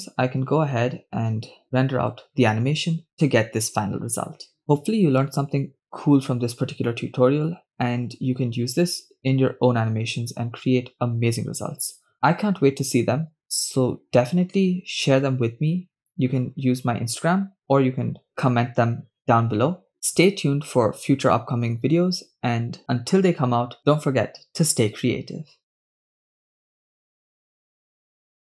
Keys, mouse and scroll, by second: 1.6-28.5 drag.